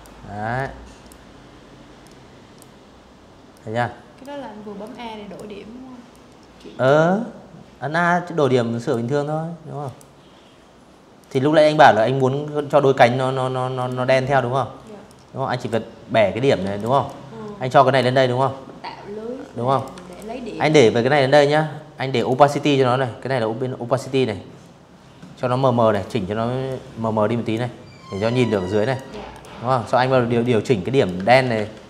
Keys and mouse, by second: 1.2 click, 2.5 click, 3.8 click, 6.0 click, 7.5 click, 8.9 click, 10.2 click, 11.4 click, 12.7 click, 14.3 v, 14.4 click, 14.7-15.7 drag, 17.4 click, 17.6 v, 17.7 click, 19.8 click, 23.6 click, 24.3-25.2 drag, 26.2 click, 26.9 click, 28.1 click, 28.9 ctrl+z, 29.2 a, 29.6 click, 30.0 click, 31.5 click.